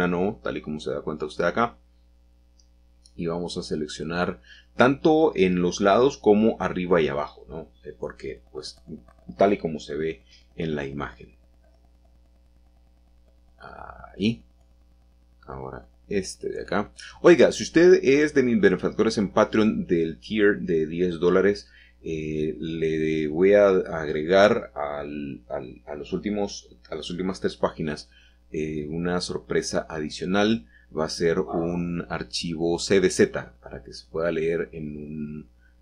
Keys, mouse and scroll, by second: 0.4 shift+click, 3.9 shift+click, 5.5 shift+click, 6.4 ctrl+<, 7.9 scroll up 2, 9.1 scroll up 2, 12.5 shift+click, 17.3 shift+middle click, 18.2-19.0 scroll down 3, 19.5 scroll down 1, 19.5 scroll up 1, 19.6-20.5 scroll down 2, 20.5 scroll up 2, 20.6-21.5 scroll down 1, 23.3 shift+click, 24.2 shift+click, 26.2 shift+click, 28.1 shift+click, 29.5-30.0 scroll down 1, 30.0-32.0 shift+middle drag, 33.9 shift+middle click, 34.0-34.7 shift+scroll down 1, 34.7-35.6 scroll up 1.